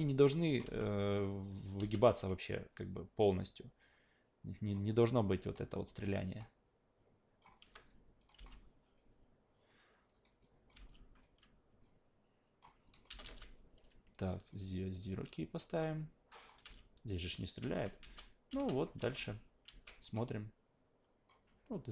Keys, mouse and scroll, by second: 0.1-0.6 drag, 0.7 alt+v, 1.8 alt+v, 2.2-4.7 drag, 6.4 click, 7.6 s, 8.2 click, 8.4 alt+v, 10.1 alt+right click, 10.4 alt+drag, 10.8 alt+v, 11.8-12.6 drag, 12.9 alt+drag, 13.1 alt+v, 13.2 alt+v, 14.4 click, 15.8-16.5 drag, 16.6 alt+v, 17.6 alt+v, 18.0 alt+v, 18.5 alt+v, 19.0 alt+v, 19.6 alt+v, 20.1-21.3 drag.